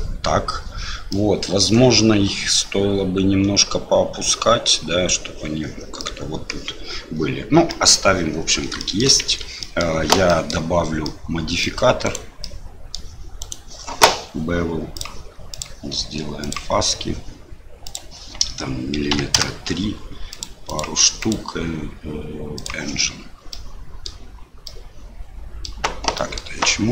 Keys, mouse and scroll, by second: 1.1 middle click, 6.0 middle click, 7.7 middle click, 8.8 shift+middle click, 9.3 Tab, 9.6 middle click, 10.3 shift+middle click, 11.0 middle click, 12.0 right click, 12.4 middle click, 13.4 right click, 14.9 click, 15.6 click, 18.0-19.7 drag, 20.4 click, 21.2-22.6 drag, 23.5 middle click, 24.6-25.6 middle drag, 26.1 middle click.